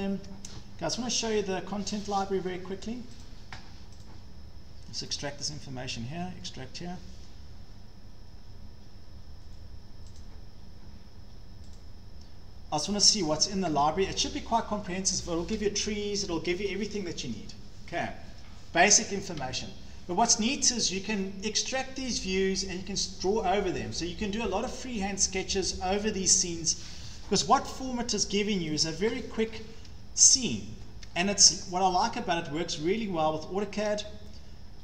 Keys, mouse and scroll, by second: 0.1 scroll, 0.3 scroll up 1, 2.0 click, 2.2 scroll, 3.2 click, 4.0 click, 5.1 click, 10.2 click, 11.8 click, 29.0 click, 29.5 scroll down 6, 30.2 Caps_Lock, 30.9 scroll down 1, 30.9-31.6 scroll, 33.9 scroll.